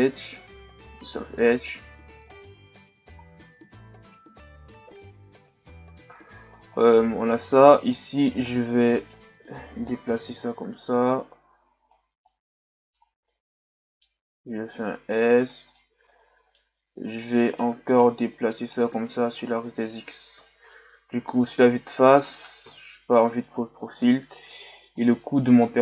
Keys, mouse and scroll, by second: 2.3-3.6 scroll down 9, 3.0 z, 3.6-4.9 middle drag, 4.9 KP_1, 6.6-7.8 scroll up 7, 7.8 alt+right click, 8.4-9.2 scroll up 4, 9.2-12.1 drag, 12.2-14.3 middle drag, 14.3 s, 15.7 scroll up 1, 15.8-18.0 middle drag, 18.0-19.1 drag, 19.1 Tab, 19.4 a, 19.5-20.1 scroll down 2, 20.1 scroll down 1, 20.3 KP_1, 21.6-22.6 scroll down 1, 22.6 KP_3, 23.4-24.0 scroll up 5, 24.0-24.7 middle drag, 24.7-25.0 scroll up 4, 25.0-25.8 middle drag.